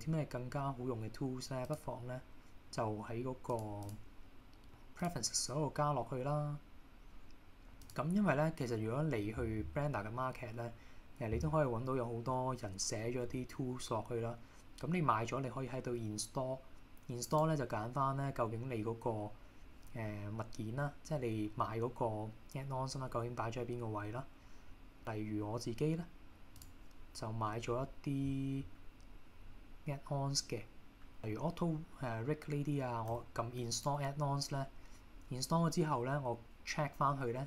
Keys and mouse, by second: 1.8-3.7 drag, 4.0-5.5 drag.